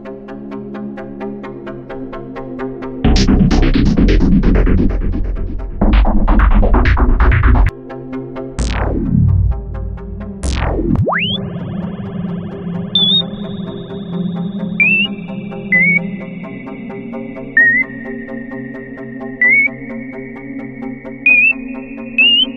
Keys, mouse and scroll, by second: 2.5 x, 7.6 x, 11.4 click.